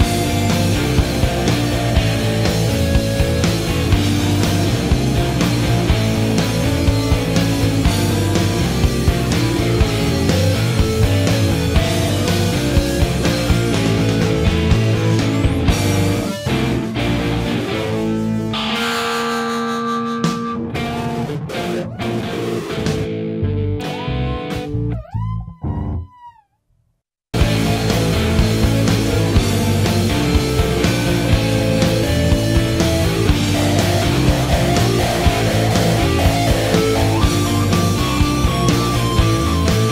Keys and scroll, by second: 16.2 scroll, 17.0 scroll, 21.3 scroll, 33.1 scroll, 33.9 scroll, 38.3-39.5 typing.